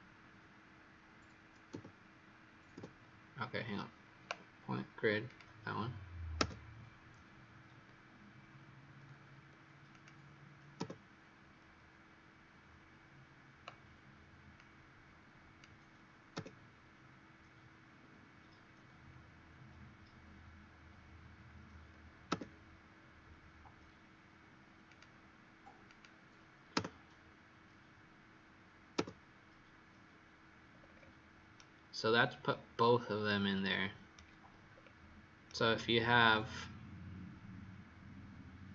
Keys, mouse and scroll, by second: 5.2 click, 6.3 Return, 9.8 click, 10.7 Return, 14.5 click, 16.3 Return, 24.8 click, 26.7 Return, 30.6-31.5 scroll up 4, 31.5 right click, 31.5-32.0 scroll up 1, 34.7 scroll down 2, 35.4 right click.